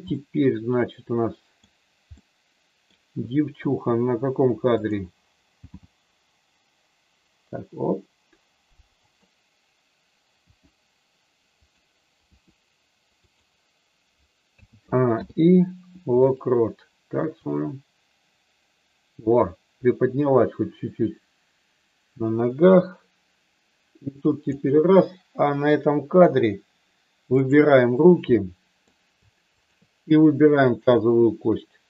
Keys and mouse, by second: 0.2-1.6 middle drag, 2.0 middle click, 4.8 click, 5.6 g, 10.4 r, 11.5 click, 12.3 r, 14.5 a, 15.0 i, 17.4-24.5 drag, 27.3 click, 28.3 middle click, 29.5 shift+click, 30.7 shift+click.